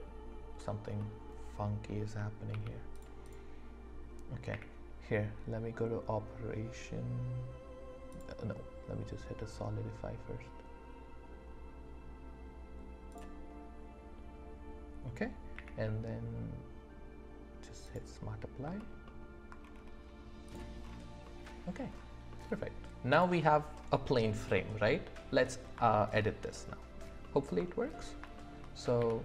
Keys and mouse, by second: 1.0 click, 2.5 v, 3.2 click, 4.5 q, 13.1 click, 15.5 q, 19.0 alt+middle click, 20.5 click, 21.2 click, 21.2 right click, 21.3 middle click, 22.3-22.8 drag, 22.3-22.8 right drag, 24.5-25.6 middle drag, 26.1 alt+click, 28.3 shift+click, 29.0 d.